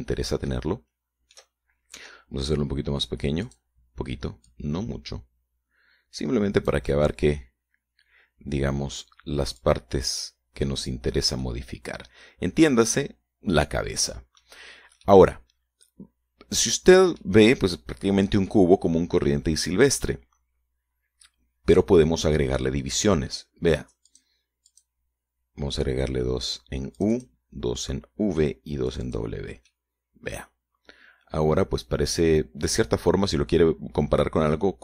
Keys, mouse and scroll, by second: 0.6-1.1 scroll up 1, 1.7-2.7 shift+middle drag, 4.7 click, 5.7-8.1 drag, 8.1-10.3 middle drag, 10.8-12.3 drag, 12.6-15.8 middle drag, 16.3-18.6 middle drag, 19.7-23.2 middle drag, 25.3 click, 25.9 click, 28.2 click, 30.1 click, 30.9-34.8 middle drag.